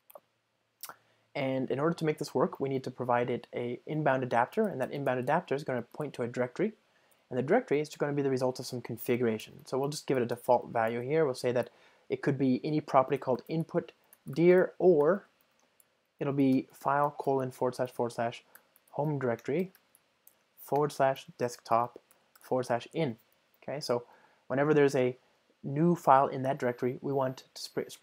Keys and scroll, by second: 0.1 Escape, 0.1 alt+Return, 7.2 alt+Return, 9.9 alt+Return.